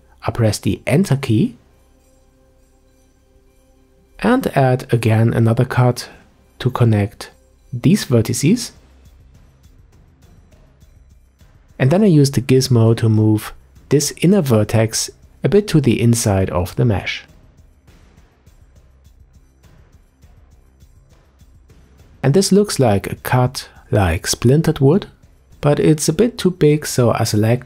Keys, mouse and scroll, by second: 4.7-5.7 scroll up 1, 5.7 k, 10.0 click, 10.3-10.7 scroll down 1, 10.7-12.8 middle drag, 12.8-14.1 scroll up 3, 14.1 g, 15.5-17.5 middle drag, 17.5-18.2 scroll up 1, 18.2-19.3 middle drag, 19.3 click, 20.8 click, 22.1-22.4 scroll down 3, 22.4-25.9 middle drag, 25.9 Tab, 26.2-26.5 scroll down 1, 26.5 middle click, 27.0-27.6 scroll up 4.